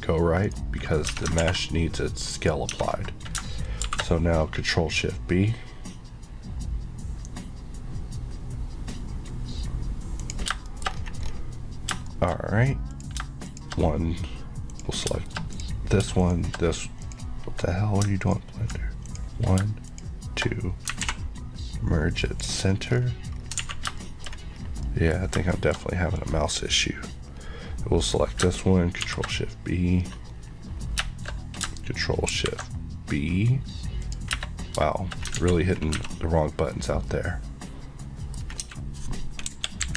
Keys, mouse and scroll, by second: 0.5 right click, 1.1 Tab, 1.5 ctrl+a, 2.4 click, 2.7 Tab, 3.8 ctrl+shift+b, 5.1-9.8 scroll up 1, 10.3 click, 10.7 shift+middle click, 10.9 shift+scroll up 1, 12.1 shift+middle click, 12.4-13.0 scroll up 1, 13.0 click, 14.7 click, 14.8 click, 15.5 click, 16.2 click, 16.3 click, 17.0 click, 18.4 click, 19.1 click, 19.9 click, 21.0 alt+m, 22.3 click, 22.9 scroll down 1, 23.6 alt+a, 24.0 middle click, 24.6 scroll down 1, 24.9 middle click, 25.3 scroll down 1, 25.5 shift+middle click, 26.3 click, 27.4 scroll up 1, 29.0 shift+scroll up 1, 29.1 shift+v, 30.3-30.8 scroll up 1, 30.8 scroll, 30.8 scroll down 1, 31.0 shift+Caps_Lock, 32.3 ctrl+shift+b, 34.1 click, 34.7 scroll, 34.7 scroll down 1, 35.0 shift+middle click, 35.7 z, 35.7 scroll down 1, 36.0 Tab, 36.1 middle click, 36.9 scroll down 1, 37.4 middle click, 38.4 scroll up 1, 38.7 Tab, 39.5 KP_1, 39.9 KP_3.